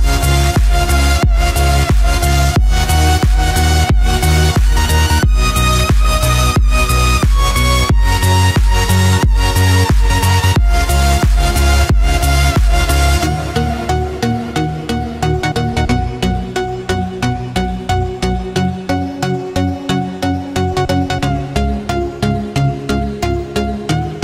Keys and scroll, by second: 15.1 ctrl+z, 16.4 ctrl+=, 17.8 ctrl+-, 21.5 ctrl+z.